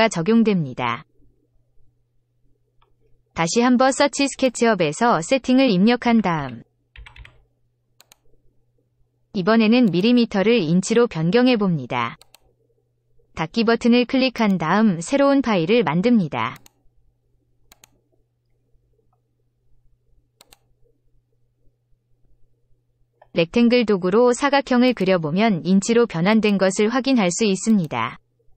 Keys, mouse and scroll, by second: 4.4 click, 6.0 s, 6.3 e, 6.9 t, 7.1 t, 9.8 click, 12.2 click, 14.3 click, 16.5 click, 17.7 click, 20.4 click, 24.8 click, 26.3 click, 27.6 click.